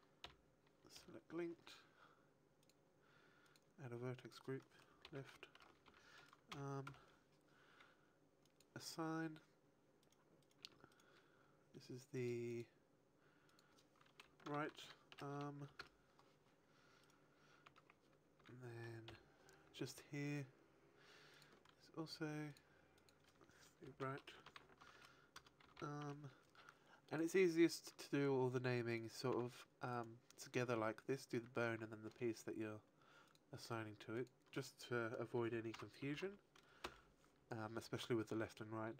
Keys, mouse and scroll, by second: 0.8 l, 2.5 click, 3.4 click, 4.1 click, 8.4 click, 9.9 right click, 10.3 right click, 10.8 Tab, 10.8 right click, 12.1 click, 12.5 click, 15.0 click, 17.0 right click, 17.6 Tab, 18.3 a, 19.6 l, 21.2 click, 22.4 click, 22.8 click, 26.9 click, 28.8 right click, 29.2 Tab, 29.8 right click, 33.2 click, 34.0 click.